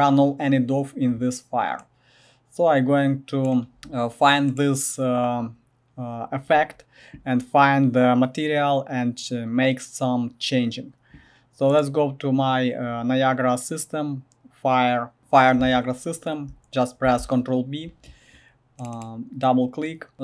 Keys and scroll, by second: 3.8 g, 17.0 ctrl+b.